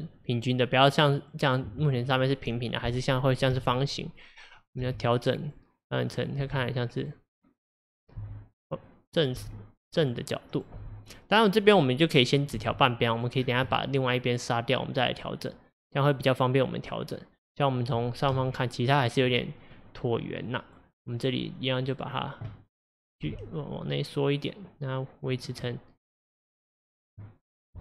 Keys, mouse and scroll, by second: 3.5 click, 3.6 g, 4.6 click, 4.9 g, 6.2 click, 6.5 g, 8.0 click, 8.2 g, 9.2 click, 9.4 g, 10.6 click, 10.8 g, 12.4 click, 12.6 g, 13.4-13.8 scroll down 1, 13.8-16.8 middle drag, 17.9-18.4 scroll up 1, 18.4 KP_7, 19.8-20.2 scroll up 1, 20.2-21.1 scroll down 1, 21.1 click, 23.3 g, 25.7-27.5 middle drag, 27.5 scroll up 1.